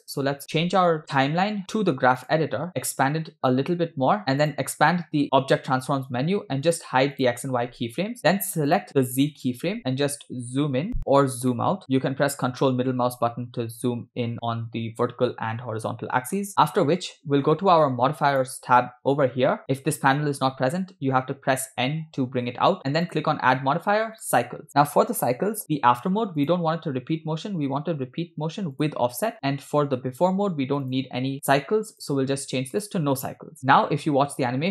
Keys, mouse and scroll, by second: 2.3 click, 2.9 click, 4.2 click, 4.5 click, 6.8 click, 7.3 click, 8.2 scroll down 2, 8.8 click, 9.8-10.9 ctrl+middle drag, 11.6 ctrl+middle click, 12.6-16.6 ctrl+middle drag, 16.6-17.0 scroll up 4, 18.4 click, 21.0 n, 21.8 n, 23.1-24.4 drag, 26.5-29.0 drag, 30.9 click, 32.0-32.9 drag, 33.6 scroll down 3, 33.8 space.